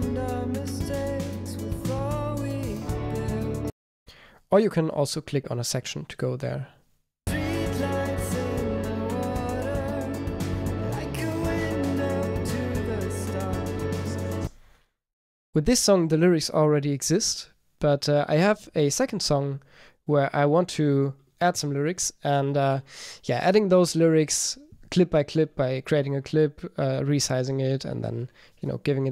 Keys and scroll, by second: 4.2 a, 28.1 super+r.